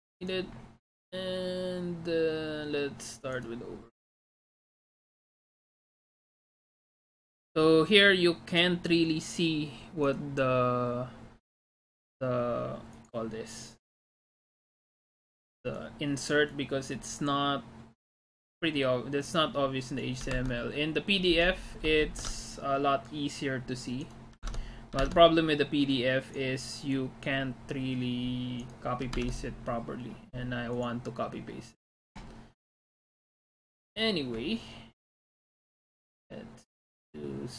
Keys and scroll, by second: 20.4 alt+Tab, 22.6 alt+shift+Tab, 24.5 alt+Tab, 25.0 alt+Tab, 29.2 alt+Tab.